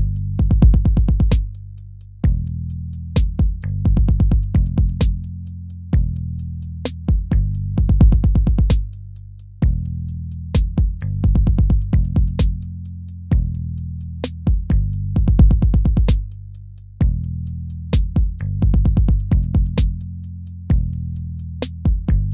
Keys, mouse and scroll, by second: 0.2 ctrl+v, 0.5 ctrl+v, 1.1 ctrl+v, 2.0 ctrl+v, 2.4 ctrl+v, 3.1 ctrl+v, 3.6 ctrl+v, 4.4 ctrl+v, 5.2 ctrl+v, 6.6 ctrl+v, 7.4 ctrl+v, 9.0 ctrl+v, 10.1 ctrl+v, 10.7 ctrl+v, 11.3 ctrl+v, 17.0 ctrl+v, 18.2 ctrl+-, 20.0 ctrl+v, 21.3 ctrl+z.